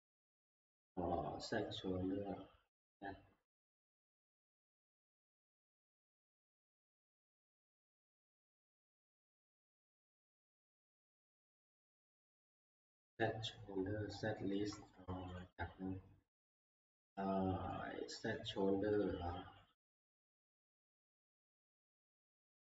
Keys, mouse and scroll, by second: 7.0 click, 9.5 click, 11.8 click, 12.1 click, 14.6 Escape, 15.0 click, 15.4 click, 17.7 middle click, 19.8 click, 21.9 click.